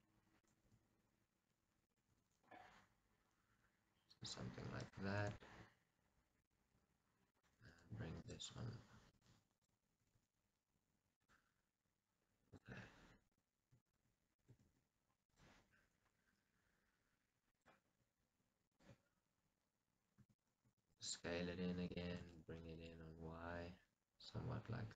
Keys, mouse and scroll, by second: 0.5 click, 2.0 g, 4.3 click, 4.9 click, 5.0 g, 6.6 click, 7.4 click, 7.5 g, 9.4 click, 10.1 g, 11.3 click, 12.5 click, 14.6 x, 17.6 click, 20.3 e, 20.7 s, 22.0 click, 22.3 g.